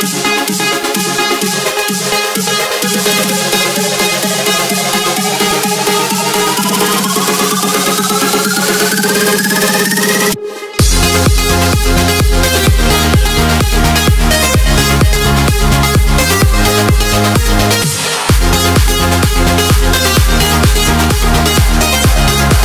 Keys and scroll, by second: 0.3 scroll up 2.